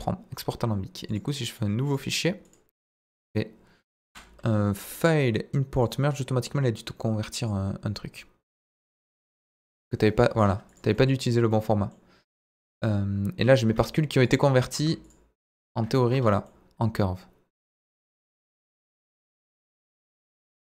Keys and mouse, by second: 1.2-2.6 drag, 4.0 Delete, 5.0-7.5 drag, 10.9 middle drag, 11.5-11.9 middle drag, 12.6 click, 13.6 Tab, 14.3 click, 14.8 Tab, 15.6 Tab, 16.5-18.4 middle drag, 18.7 middle click.